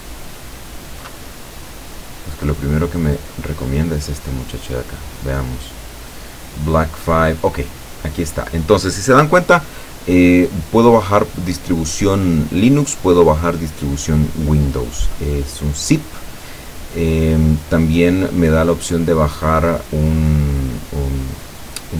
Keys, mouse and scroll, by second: 3.4 middle click, 4.6 middle click, 5.2 click, 6.7-7.1 scroll up 2, 7.7 scroll down 2, 9.2 scroll down 2, 15.9-16.4 scroll down 1, 16.9-17.2 scroll down 2.